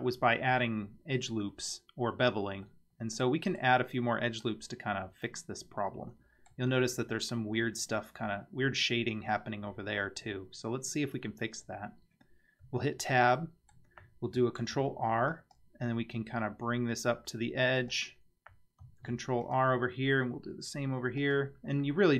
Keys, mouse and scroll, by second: 2.7-3.6 middle drag, 3.9-4.4 scroll down 2, 4.4-6.5 middle drag, 12.6 Tab, 13.4 middle click, 14.6 ctrl+r, 19.0 ctrl+r, 21.9-22.1 middle drag.